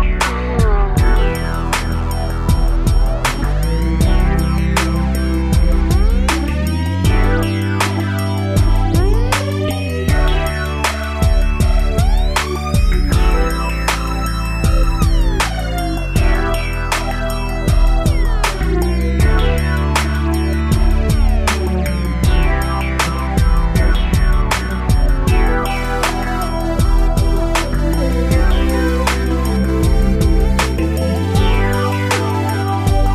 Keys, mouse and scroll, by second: 3.8 Right, 4.0 Right, 5.9 shift+middle click, 6.1 middle click, 6.3 middle click, 7.5 click, 8.4 click, 9.7 click, 10.7 click, 13.3 ctrl+c, 13.6 ctrl+shift+v, 14.4 Down, 14.8 Right, 14.9 Down, 15.1 Right, 15.4 Right, 21.7 shift+middle click, 24.1 ctrl+v, 25.5 ctrl+shift+v, 27.6 middle click, 28.5 scroll up 1, 28.8 shift+middle click, 29.0 shift+middle click, 29.4 middle click, 31.8 click.